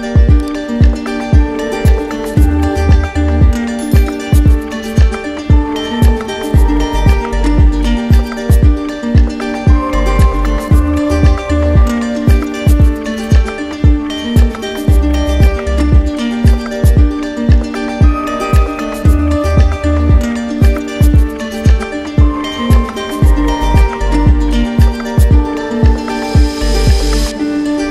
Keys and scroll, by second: 21.9 ctrl+alt+z, 24.4 ctrl+alt+z.